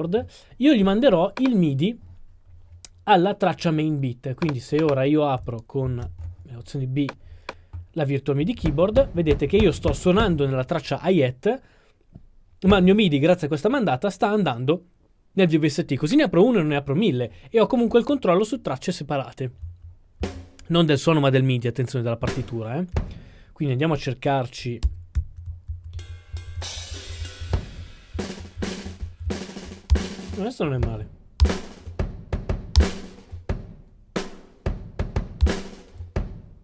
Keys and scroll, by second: 5.8 alt+b, 8.7-10.3 typing, 12.7 q, 19.7-20.3 typing, 22.3-23.1 typing, 24.9 Right, 25.3-30.2 typing, 31.5 typing, 32.9 typing, 35.5 typing.